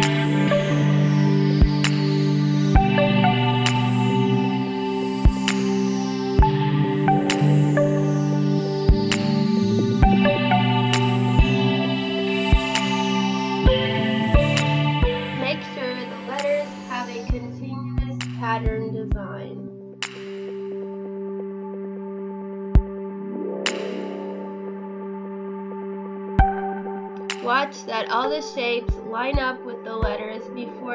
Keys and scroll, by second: 0.3 space, 1.8 Delete, 2.9 space, 3.5 space, 4.6 Delete, 6.2 space, 9.3 space, 10.2 space, 11.0 space, 13.1 ctrl+z, 17.9 ctrl+z, 19.9 space, 20.6 space, 21.8 space, 22.8 ctrl+c, 30.5 space.